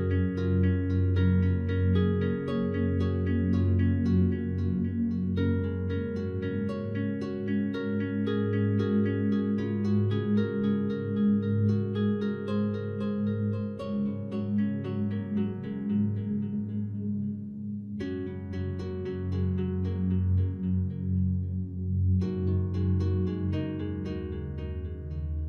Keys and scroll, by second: 2.8 ctrl+z, 10.7 ctrl+alt+z, 17.5 ctrl+0, 22.7 ctrl+t.